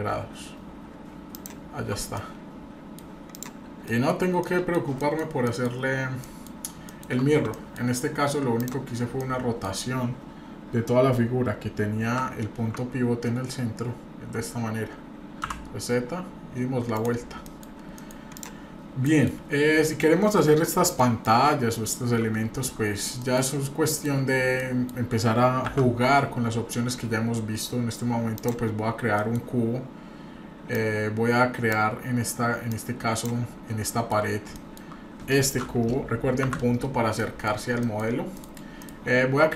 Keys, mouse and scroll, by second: 2.2-3.0 middle drag, 3.3 click, 3.9 middle click, 4.1-4.4 scroll down 1, 4.4 middle click, 5.0 middle click, 5.4 middle drag, 5.8-6.2 scroll down 1, 6.2 middle drag, 6.9 shift+middle click, 7.2-7.5 scroll up 1, 7.5 middle click, 8.5 click, 8.9 scroll down 1, 9.2 middle click, 12.0 r, 17.4 scroll down 1, 17.4 middle click, 17.9 middle click, 18.3 click, 18.7 scroll up 1, 19.0 middle click, 19.7 scroll up 1, 19.8 shift+middle click, 20.6 scroll up 2, 21.0 shift+middle click, 21.7 shift+middle click, 23.2 middle click, 23.9 shift+middle click, 24.2-24.6 scroll up 1, 24.6 middle click, 25.7 shift+a, 28.8-29.2 scroll down 2, 29.2 middle click, 29.5 scroll up 1, 30.7-31.7 drag, 32.7 click, 33.4-34.4 scroll up 3, 33.8-34.2 shift+middle drag, 34.5-34.9 shift+middle drag, 36.4 KP_Decimal, 36.9-37.6 scroll down 4, 37.2 middle click, 37.8 middle click, 38.3 middle click, 38.8 middle click.